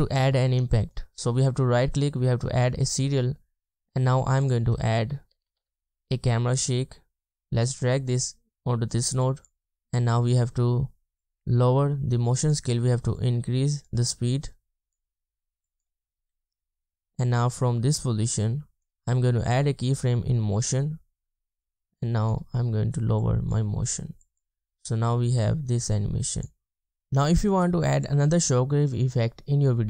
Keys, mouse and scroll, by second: 2.7 right click, 4.5 double click, 5.4 typing, 24.7 typing, 27.1 space, 28.6 space.